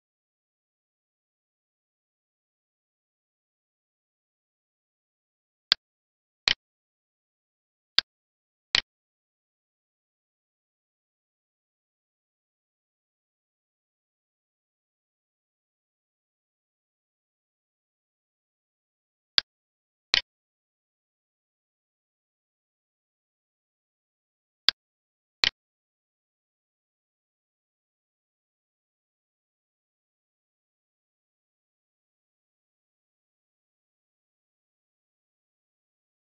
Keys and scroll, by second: 13.3 ctrl+s.